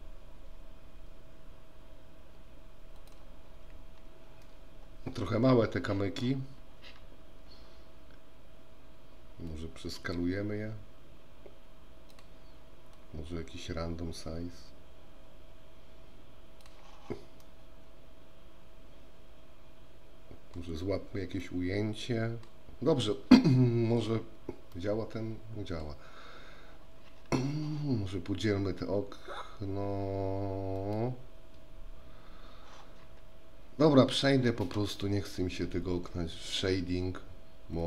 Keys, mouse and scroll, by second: 4.6-5.4 middle drag, 9.6-12.3 drag, 13.2-16.9 drag, 17.6-20.8 middle drag, 21.6-22.7 middle drag, 24.8-26.1 middle drag, 30.8 right click.